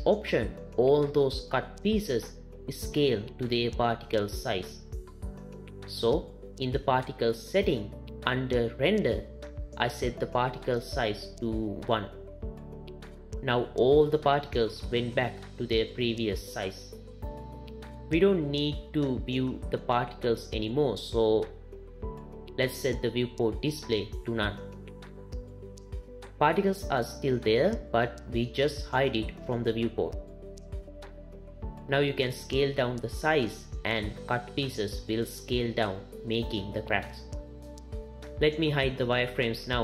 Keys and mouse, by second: 0.6 click, 7.5 click, 9.2 click, 11.0-12.6 drag, 20.6 click, 21.8 click, 24.9 click, 32.7 shift+click, 33.2-37.9 shift+middle drag, 38.8-39.8 middle drag.